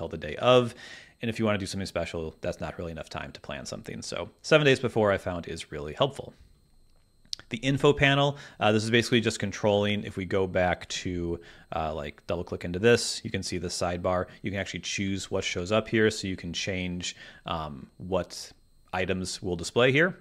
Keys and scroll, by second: 10.9 super+`, 15.0 super+`.